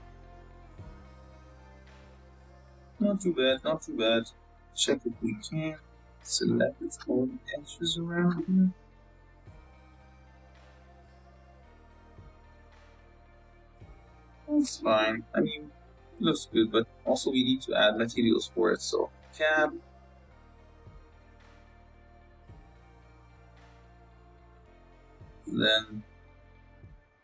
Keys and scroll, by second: 1.4 g, 2.0 Tab, 2.7 2, 9.5 s, 10.7 KP_0, 11.4 s, 12.5 Tab, 16.9 Tab, 19.7 Tab, 22.6 BackSpace, 22.8 BackSpace.